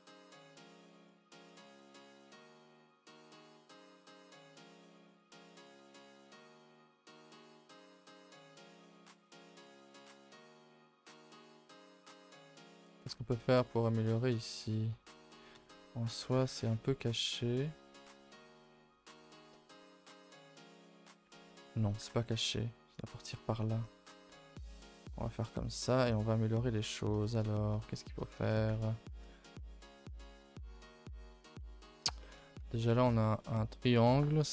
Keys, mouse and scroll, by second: 0.4-5.0 middle drag, 5.0 g, 5.7 middle drag, 6.0 Tab, 6.2 a, 6.4 a, 6.4 scroll down 5, 6.7 ctrl+s, 7.5 click, 7.9 a, 8.1 a, 8.1 middle click, 8.4 ctrl+s, 8.7-9.1 shift+middle drag, 9.1-10.3 scroll up 2, 10.3 click, 10.5 shift+middle drag, 10.7 scroll up 4, 10.9 Tab, 11.1-12.2 middle drag, 12.2 click, 12.4 middle click, 13.1 g, 15.6 KP_0, 16.1-16.5 scroll up 4, 16.7 z, 17.7 g, 20.1 click, 20.5 z, 21.2 scroll down 1, 21.5 scroll up 2, 22.0 g, 23.5 z, 24.2 z, 24.8 g, 26.1 click, 26.4 middle click, 26.9-28.4 scroll up 15, 27.2 shift+middle click, 28.0 shift+middle click, 28.4 a, 28.5 a, 28.7 middle click, 29.1 ctrl+s, 29.3-32.4 shift+middle drag, 32.4 scroll up 1, 32.6 a, 32.8 a, 32.8 middle click, 33.1 scroll down 1, 33.4 middle click, 33.8 scroll down 4, 34.0 middle click.